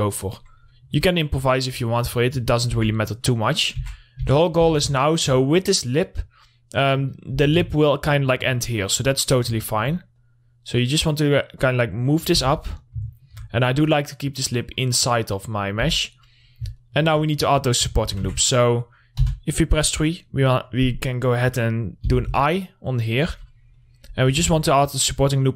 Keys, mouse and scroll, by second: 0.5 middle click, 0.8-1.2 scroll up 1, 1.2 middle click, 1.4-2.5 scroll up 1, 2.5 scroll down 1, 3.2 Tab, 3.7 middle click, 4.1 scroll down 1, 4.2 Tab, 4.8 middle click, 5.1 w, 5.4 alt+middle click, 6.2-7.8 drag, 7.8 z, 8.1 alt+middle click, 10.6-12.8 drag, 12.8 2, 13.0 click, 13.5 middle click, 14.3-15.6 drag, 15.6-16.3 scroll up 1, 16.3 Tab, 16.5 middle click, 16.9 scroll up 1, 17.2 alt+middle click, 18.7 Tab, 18.9 middle click, 19.4 3, 19.9 click, 20.4 middle click, 22.5 i, 23.5 click, 23.8-24.1 scroll up 1, 24.2 middle click, 24.5 scroll up 1, 24.8 ctrl+r, 25.2 click.